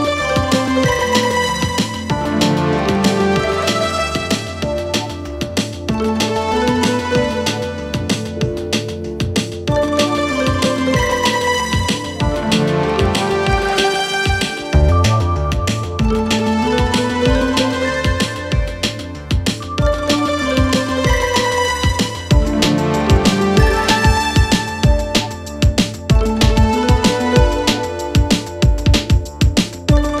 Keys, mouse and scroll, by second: 0.0-1.0 drag, 2.9-3.9 drag, 5.6-6.6 right drag, 7.1-8.1 drag, 8.5-10.4 drag, 10.5 click, 11.3-12.3 drag, 12.7-14.6 drag, 17.5-18.6 drag, 18.8 click, 19.8-20.8 drag, 21.3-22.3 drag, 22.7-23.7 drag, 25.6-26.7 drag, 26.9-28.5 drag, 29.2-30.2 drag.